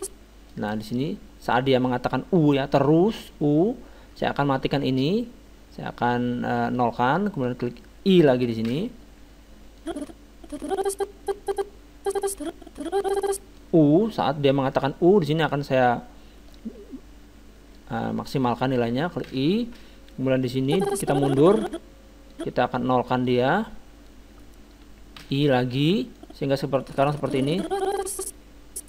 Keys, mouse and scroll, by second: 6.7-8.5 drag, 8.7 i, 9.8-11.4 drag, 16.5-18.3 drag, 19.3 i, 20.7-22.3 drag, 23.3-24.9 drag, 24.9 click, 25.2 i, 26.2-27.8 drag.